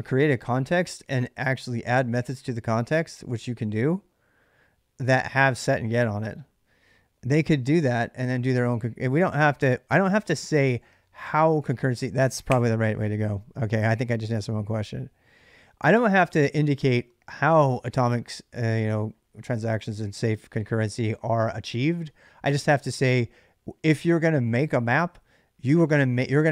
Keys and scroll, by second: 9.7 ctrl+[, 9.9-12.0 typing.